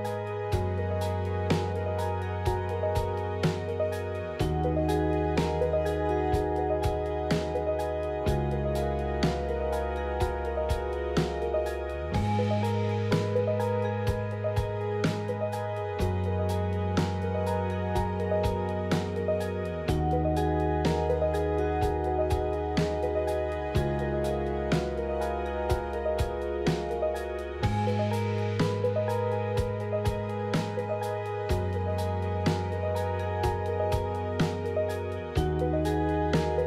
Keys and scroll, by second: 0.3 F4, 1.3 ctrl+z, 3.8 1, 4.6 2, 5.8 1, 11.6 2, 17.6 1, 18.6 1, 19.6 2, 21.6 1, 22.6 1, 23.9 1, 27.8-28.6 typing, 32.2 1, 33.1 z, 33.7 2, 36.0 ctrl+z.